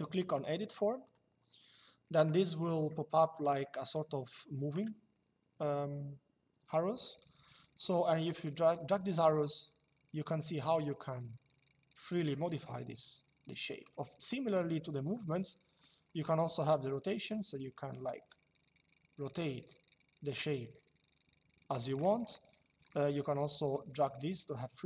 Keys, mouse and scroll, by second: 0.7 click, 3.3 shift+middle click, 8.0 click, 14.9 typing, 16.3 click, 22.0 typing, 23.4 click.